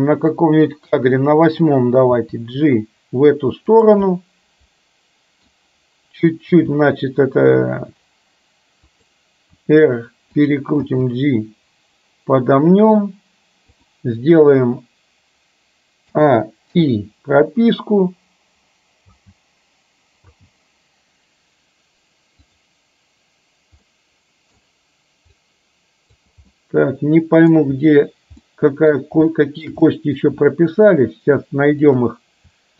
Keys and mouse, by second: 1.4 click, 2.3 g, 4.1-5.5 middle drag, 6.6 g, 9.6 r, 11.0 g, 16.1 a, 16.8 i, 19.1 space, 20.3 space, 23.9-24.6 middle drag, 25.5 click, 26.6-27.5 middle drag, 28.5-29.0 middle drag, 29.4 shift+middle drag, 29.9-30.3 middle drag, 31.9 click.